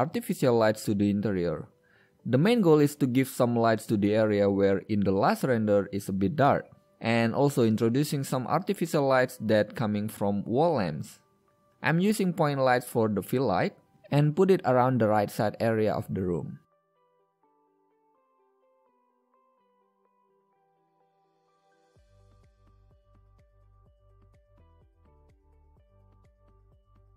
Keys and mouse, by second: 2.1 shift+a, 5.6 z, 6.1-7.8 drag, 8.0 middle click, 12.0 n, 12.5 middle click, 14.4 KP_5, 15.3 KP_1, 16.5 g, 20.3 drag, 21.8 KP_7, 23.8 g.